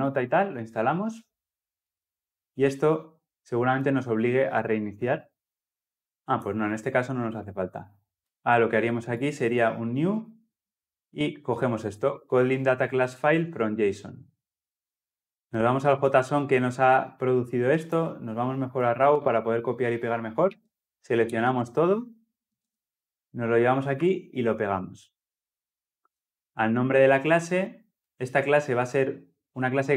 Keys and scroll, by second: 23.8 ctrl+v.